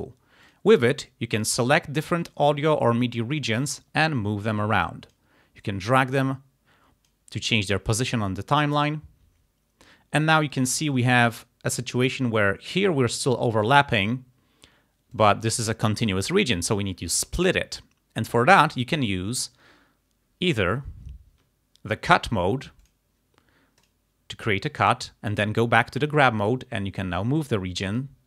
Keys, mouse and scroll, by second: 0.5 click, 1.7 click, 2.3 click, 3.8-5.4 drag, 5.7-7.3 drag, 10.4 click, 11.0-12.3 drag, 15.2 click, 22.9 click, 23.9 click, 25.8 click, 26.5-28.2 drag.